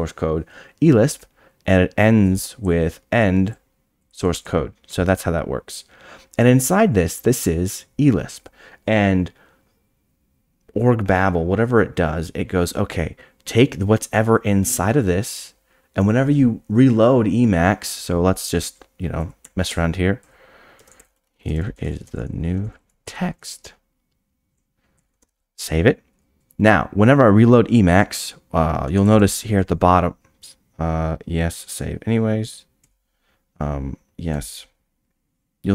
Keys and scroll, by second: 19.4-25.0 typing, 32.9 y.